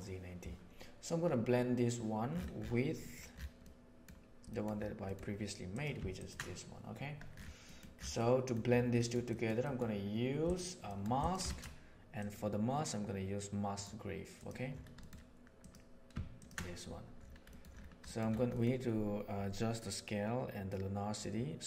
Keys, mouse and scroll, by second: 3.0 middle click, 3.5 middle click, 4.4 middle click, 5.7 click, 6.1 ctrl+shift+click, 7.7 middle click, 8.2 middle click, 9.0 middle drag, 9.2 middle click, 9.5 middle click, 10.4 drag, 10.9 middle click, 11.1 right click, 11.5 shift+a, 15.0 click, 16.3 ctrl+shift+click, 17.5 middle click, 18.1 middle click, 18.5 middle click.